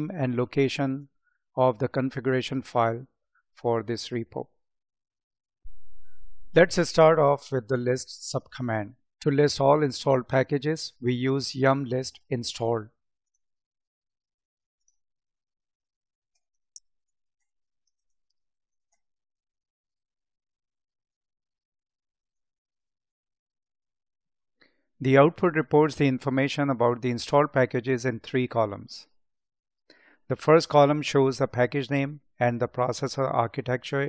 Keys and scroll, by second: 16.9 space, 17.8 space.